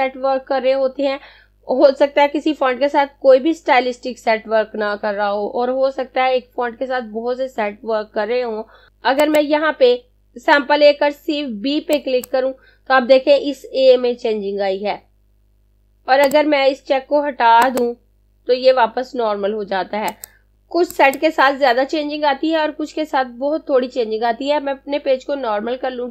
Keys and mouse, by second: 8.9 click, 12.0 click, 16.1 click.